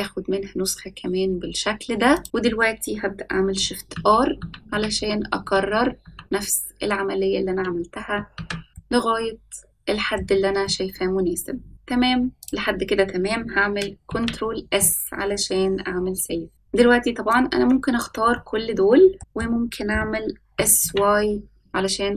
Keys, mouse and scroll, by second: 3.9-6.0 typing, 8.3 shift+r, 8.7-10.1 middle drag, 10.6-11.7 middle drag, 11.7 scroll down 2, 12.4 click, 12.4 scroll up 1, 14.1 ctrl+s, 14.8-16.5 middle drag, 16.5 scroll down 3, 17.3-18.0 drag, 18.3-19.3 middle drag, 19.2 scroll up 1, 20.5 s.